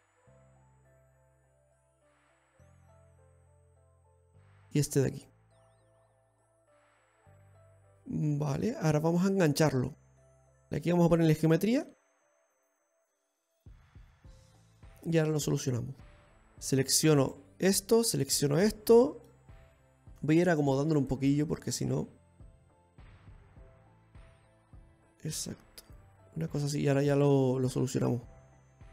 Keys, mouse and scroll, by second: 0.2-0.7 scroll up 1, 0.7-1.0 scroll up 3, 1.0 middle click, 2.0-3.1 scroll down 10, 3.3 middle click, 4.6-5.9 scroll up 5, 5.9 right click, 5.9 scroll up 1, 6.8 x, 7.7-8.1 scroll down 3, 8.0 middle click, 9.6-10.2 scroll up 4, 12.5 ctrl+r, 14.2-14.7 scroll up 1, 14.7 middle click, 14.7 scroll up 1, 15.6-16.2 scroll up 1, 16.2-16.7 scroll down 2, 17.0 right click, 17.6 alt+shift+right click, 19.6 middle click, 20.0-20.4 scroll down 1, 20.4 right click, 21.2 shift+right click, 21.8 click, 23.9 middle click, 27.9-28.7 scroll down 2, 28.7 click.